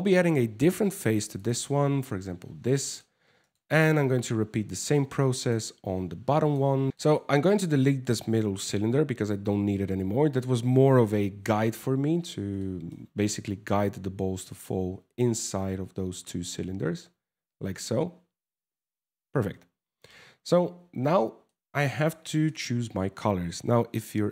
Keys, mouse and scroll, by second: 2.0 scroll down 2, 2.3 shift+middle click, 3.1 right click, 4.4 click, 5.0 click, 6.1 click, 6.9 right click, 6.9 shift+middle click, 7.9 x, 9.7 alt+a, 11.0 KP_0, 11.8 scroll up 4, 12.2 shift+middle click, 19.7 alt+q, 20.3 alt+a, 20.8 middle click, 21.4 shift+middle click, 21.8 scroll up 4, 22.1 middle click.